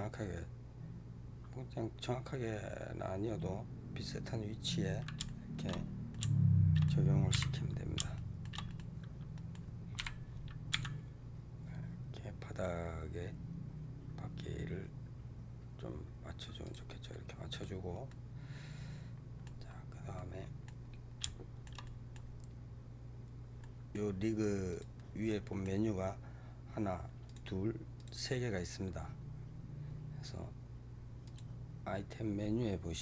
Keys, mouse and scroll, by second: 5.1 shift+middle click, 5.6 scroll up 4, 6.0-7.2 middle drag, 7.2 KP_3, 8.0-9.8 shift+middle drag, 9.8 KP_3, 10.6 g, 17.0-19.6 middle drag, 19.6-20.0 scroll up 1, 20.0-20.8 middle drag, 20.8 scroll down 1, 21.1-24.6 shift+middle drag, 24.6 click, 25.2-27.2 middle drag, 27.2 click, 27.9 click, 31.1 click.